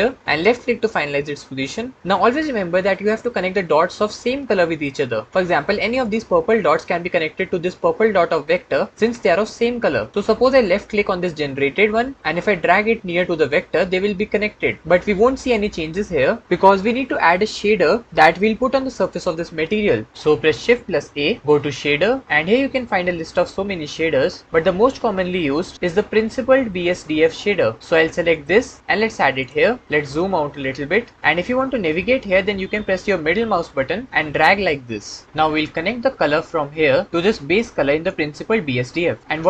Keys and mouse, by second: 11.3 click, 12.3-13.7 drag, 20.5 shift+a, 33.2-35.2 drag, 37.1-37.9 drag.